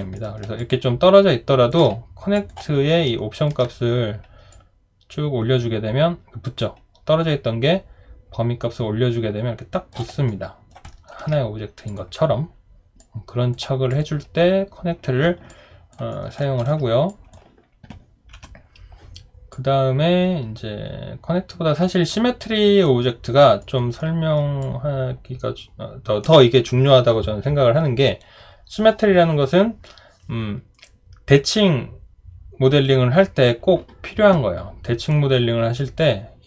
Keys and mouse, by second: 0.1 alt+middle click, 0.6 alt+click, 2.9 alt+right click, 10.3 alt+right click, 10.9 alt+middle click, 15.5 alt+click, 16.1 alt+right click, 16.4 alt+middle click, 18.3 Delete, 23.6 alt+right click, 24.0 alt+middle click, 24.6 alt+click.